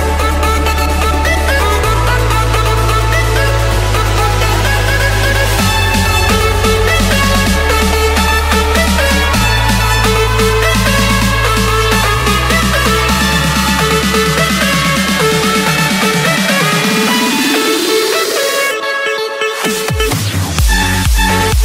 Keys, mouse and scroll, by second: 3.7 click, 4.4 click, 5.0 click, 6.6 click, 7.3-7.6 scroll down 3, 7.8-8.4 scroll up 3, 12.7 click, 12.9-13.7 scroll, 13.9 scroll down 7, 14.1 scroll up 1, 14.2 scroll, 14.5 Escape, 15.2 click, 15.8 click, 16.9-18.0 drag, 18.0-18.7 typing, 19.1 Return, 20.0 Escape.